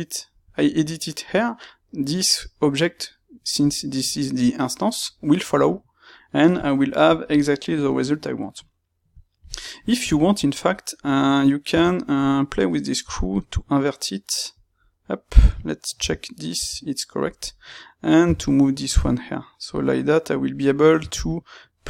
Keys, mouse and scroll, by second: 2.9 click, 3.6-10.6 middle drag, 10.6 click, 11.6 space, 17.4 click, 18.2 g, 20.4 click, 20.9 space.